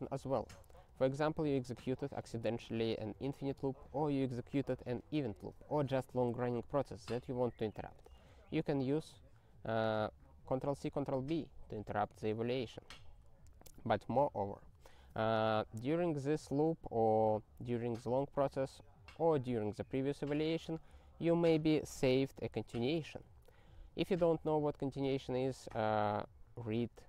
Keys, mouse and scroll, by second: 0.8 ctrl+e, 8.1 ctrl+b, 12.8 ctrl+n, 12.9 ctrl+n, 21.0 ctrl+e, 21.2 ctrl+n, 21.5 ctrl+e, 22.4 ctrl+n, 22.5 ctrl+a, 22.9 ctrl+alt+f.